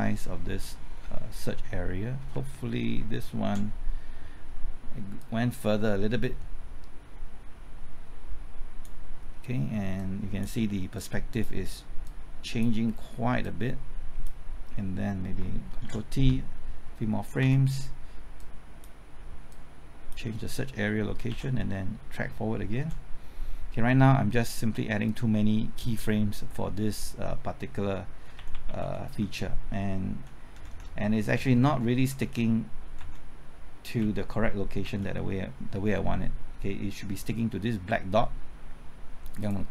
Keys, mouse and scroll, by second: 2.9 typing, 5.2 ctrl+t, 5.2-14.6 drag, 15.8 ctrl+t, 17.4 Left, 18.3-20.6 drag, 21.2 ctrl+t, 22.7 Left, 28.5-30.1 typing, 30.5 Right, 32.2 Left, 32.9 Right, 33.9 Left, 39.4 click.